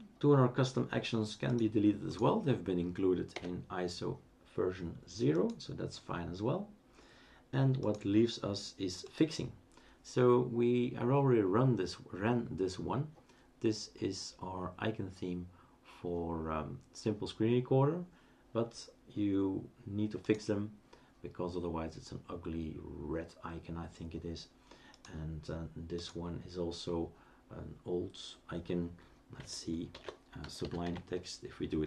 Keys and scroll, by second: 3.3 Delete, 29.9 shift+super+d, 30.2-31.3 typing.